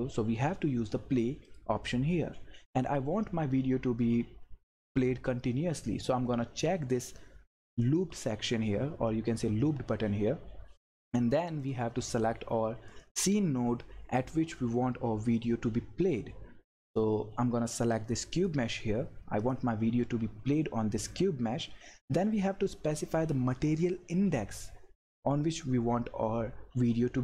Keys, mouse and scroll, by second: 1.5 click, 7.8-10.8 drag, 11.4 click, 18.3 click.